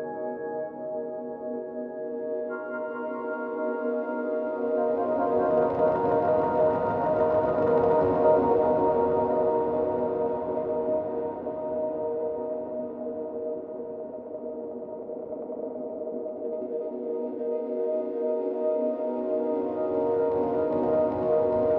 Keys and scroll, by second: 8.3 ctrl+d.